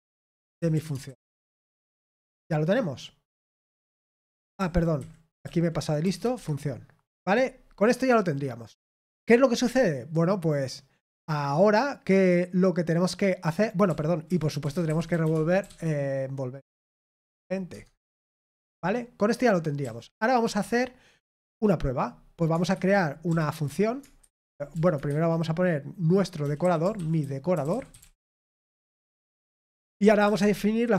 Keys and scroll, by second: 0.0-2.5 typing, 6.0 typing, 6.3 Escape, 15.3-18.1 typing, 18.2 Return, 18.5 Escape, 27.7-29.1 typing.